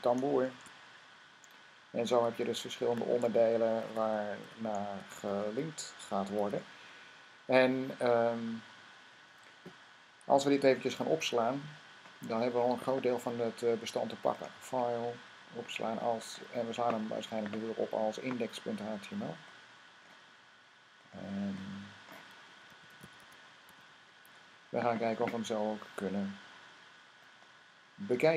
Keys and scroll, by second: 0.3 v, 3.4-6.2 typing, 22.3-24.0 typing.